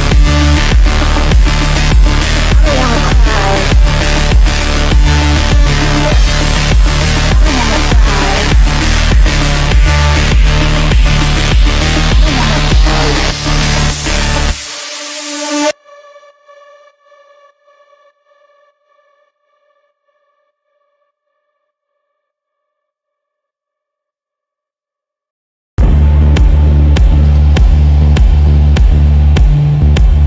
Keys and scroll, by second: 0.0 shift+Page_Down, 0.4 Escape, 1.1 shift+Page_Down, 1.4 w, 2.9 F3, 4.1 Delete, 6.7 shift+F2, 8.2 shift+F2, 8.6 F3, 9.5 Escape, 17.7 f, 20.0 d, 23.5 f, 25.9 shift+F2, 26.3 Delete.